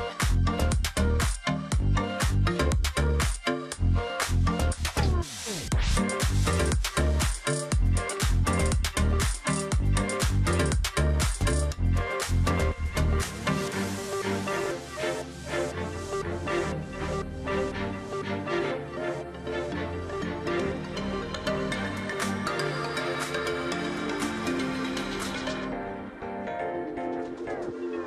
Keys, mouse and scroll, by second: 0.9 space, 3.7 ctrl+click, 4.5 space, 6.0 ctrl+click, 6.1 space, 6.9 alt+scroll down 1, 7.6-9.4 ctrl+scroll up 2, 9.4 ctrl+click, 10.1 ctrl+click, 11.2-11.7 alt+scroll up 1, 11.7 ctrl+click, 12.2 alt+scroll down 1, 12.8-13.5 alt+scroll up 1, 13.5 ctrl+click, 14.1 ctrl+click, 14.9-15.3 alt+scroll down 1, 15.3 space, 16.7 space, 17.8-18.1 alt+scroll down 1, 18.1 space, 18.5 alt+scroll up 1, 21.2 alt+click, 23.5 ctrl+click, 24.2 ctrl+click, 24.9-25.4 alt+scroll down 1, 25.7-26.0 alt+scroll down 1, 26.0 space, 26.7 alt+scroll up 1, 26.9 space.